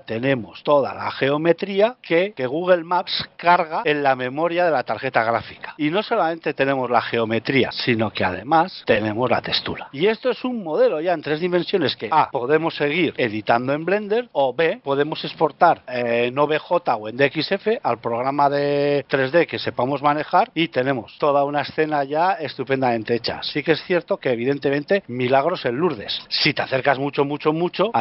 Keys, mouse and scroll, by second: 0.4-1.1 scroll up 6, 1.6 shift+middle click, 1.9 middle click, 4.4 middle click, 8.8 click, 9.8 middle click, 21.1-21.6 scroll up 5, 21.6 middle click, 23.4-24.2 scroll down 2, 24.6-25.0 scroll up 1, 25.4-26.8 scroll down 5, 26.2 shift+middle click, 26.8 middle click, 26.8-27.3 shift+scroll down 1, 27.3-27.8 scroll up 3, 27.8-28.0 scroll up 10.